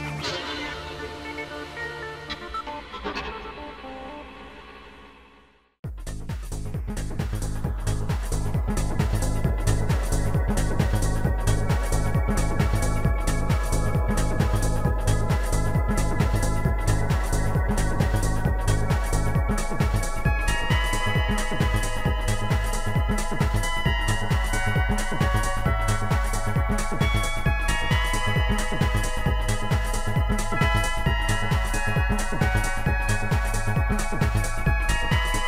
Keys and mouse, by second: 0.7 click, 1.4 click, 3.7 click, 6.2 click, 6.5 shift+click, 8.3 shift+click, 10.4 shift+click, 12.3 shift+click, 13.8 Delete, 20.3 Delete, 21.4 click, 21.7 click.